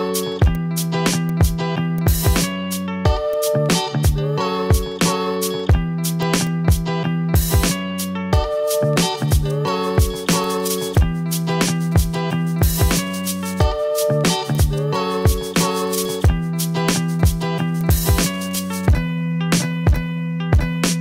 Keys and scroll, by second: 1.2 ctrl+z, 1.6 ctrl+z, 3.1 ctrl+z, 6.0 v.